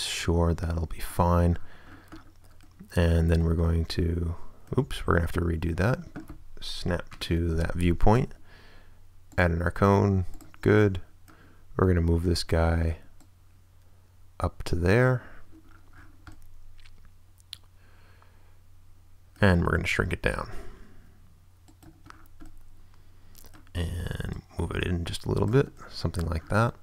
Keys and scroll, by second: 4.9 super+z, 7.1 7, 8.5 space, 19.8 s.